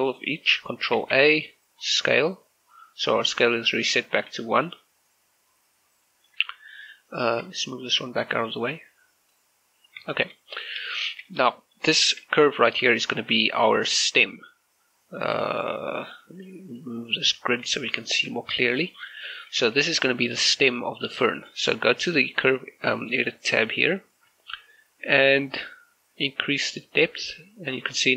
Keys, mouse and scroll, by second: 1.1 ctrl+a, 1.9 click, 2.8 right click, 6.1 shift+middle click, 7.3-8.5 scroll down 1, 8.5-9.8 drag, 9.8 scroll up 1, 10.2 shift+middle click, 10.5 right click, 11.1 shift+middle click, 11.7 middle click, 13.7-15.4 scroll down 1, 15.4 click, 17.3 click, 17.8 shift+middle click, 18.5-19.8 shift+middle drag, 23.3 click, 26.9-28.1 drag.